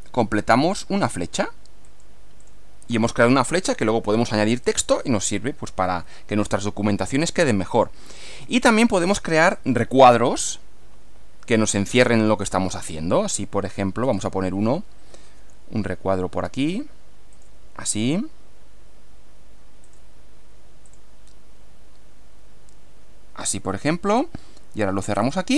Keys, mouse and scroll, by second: 1.9 click, 2.4 click, 2.9 scroll down 2, 3.7 scroll down 2, 4.9 scroll down 1, 6.5-8.1 middle drag, 9.6 click, 14.1 click, 17.3 click, 19.9 click, 20.9 click, 23.5 click, 25.3 click.